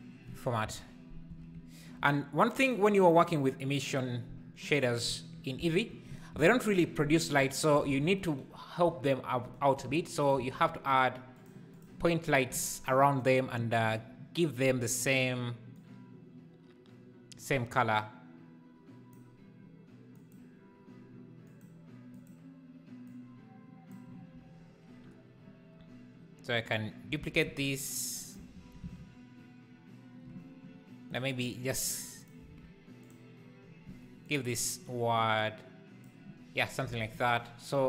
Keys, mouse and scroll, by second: 1.3 alt+a, 3.0 click, 7.9 alt+a, 10.2 shift+right click, 10.3 shift+a, 15.7 click, 27.2 alt+d, 28.5 shift+r, 28.7 shift+r, 31.2 Left, 33.0 Left, 33.0 click, 34.3 Left, 35.1 Left, 36.9 alt+a.